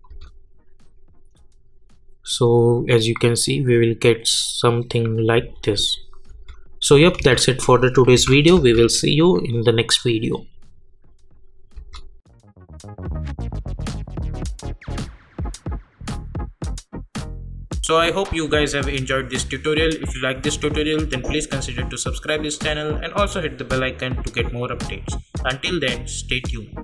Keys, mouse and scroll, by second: 0.1 space, 5.4 space, 8.1 n, 8.5 space, 11.7 space.